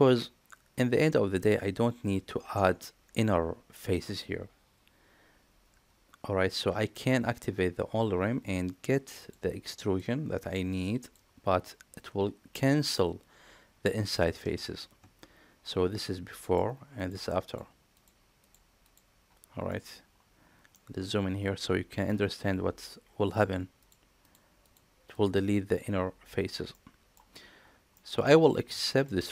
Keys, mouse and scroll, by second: 16.3 click, 16.8 click, 17.3 click, 17.8 click, 18.2 click, 18.7 click, 19.6 middle click, 20.6-21.9 middle drag, 23.1 click, 23.6 click, 24.1 click, 24.5 click, 25.0 click, 25.5 click, 26.6-27.0 middle drag, 27.8 middle drag, 28.7 shift+middle drag, 29.1-29.3 middle drag.